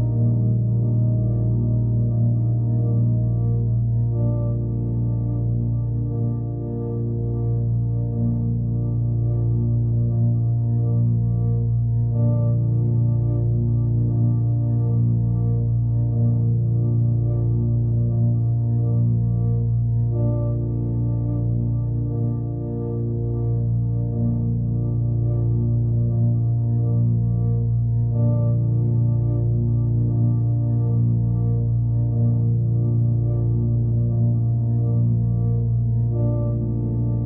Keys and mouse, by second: 0.2-1.7 alt+middle drag, 2.9 click, 5.6 Tab, 6.2 1, 6.7 alt+x, 7.0 click, 8.0 g, 10.4 Tab, 10.8 ctrl+a, 11.2-11.9 right drag, 12.1 click, 12.6 g, 13.9 ctrl+a, 14.3-14.9 right drag, 15.4-15.8 alt+middle drag, 16.0 alt+x, 16.5-17.2 alt+middle drag, 17.8 alt+middle drag, 19.3-19.8 middle drag, 20.2 alt+middle click, 22.8 click, 25.1 click, 30.5 click.